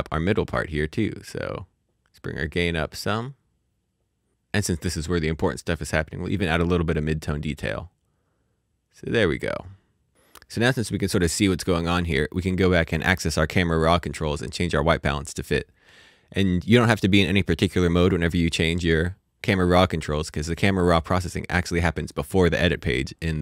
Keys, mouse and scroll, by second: 1.2 click, 3.4 scroll up 1, 6.3-9.6 scroll up 1, 9.6 click, 9.6 scroll down 1, 10.1 click, 12.0 click, 18.8 click.